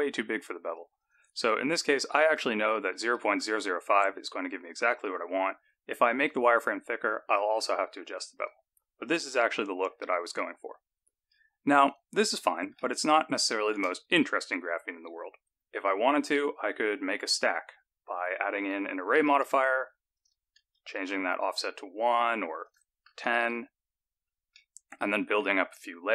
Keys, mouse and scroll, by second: 0.9 click, 2.4 KP_0, 6.2 click, 8.3 click, 9.0 click, 9.4-11.7 scroll down 15, 11.7 scroll down 1, 11.8 click, 12.7 shift+middle click, 14.3-14.8 scroll down 1, 14.8-15.6 scroll down 2, 16.3 click, 18.5 click, 20.1 click, 22.6 click, 24.5 middle click.